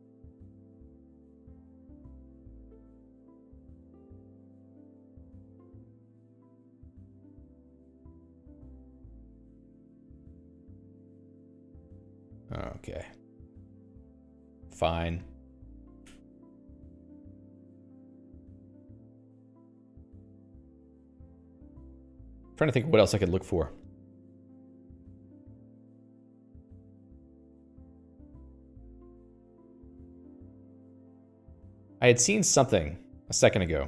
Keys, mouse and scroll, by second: 17.6 Escape, 17.7 Escape, 18.4 Escape, 19.2-19.7 scroll up 2, 19.7 Escape, 19.8 Escape, 22.4 alt+x, 24.6 Return, 31.9 Escape, 33.4 click.